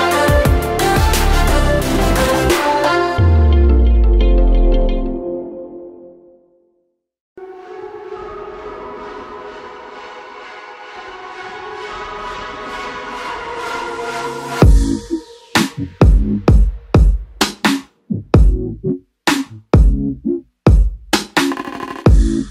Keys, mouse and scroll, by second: 0.8 click, 4.6 ctrl+s, 7.0 click, 9.8 click, 14.2 click, 19.1 ctrl+t, 20.0 click.